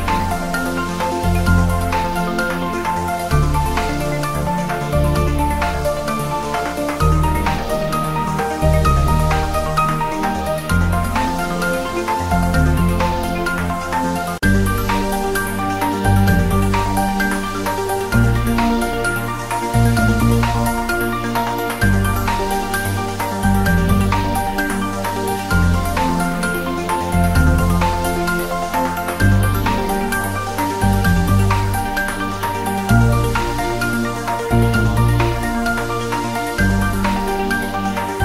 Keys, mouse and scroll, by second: 0.4-1.3 typing, 2.6 click, 2.8-3.2 scroll down 1, 3.4 shift+d, 3.9 click, 4.1 ctrl+z, 4.8 g, 7.6 click, 7.8-8.7 typing, 8.3-8.6 scroll down 1, 10.3 click, 10.9-11.6 scroll down 1, 11.9 scroll up 1, 12.6 s, 15.0 y, 15.6 x, 17.2 click, 17.6 scroll down 1, 19.2 click, 20.2 Tab, 20.5-22.2 drag, 26.1 click, 26.7 alt+e, 27.1 click, 29.1 click, 29.4-29.9 scroll down 1, 29.9-31.6 drag, 31.6 Tab, 32.6 scroll up 1, 33.2 Tab, 33.7 ctrl+r, 35.2 click, 36.1 Tab, 36.9 click, 37.4 Tab, 37.9 ctrl+r, 38.0 click.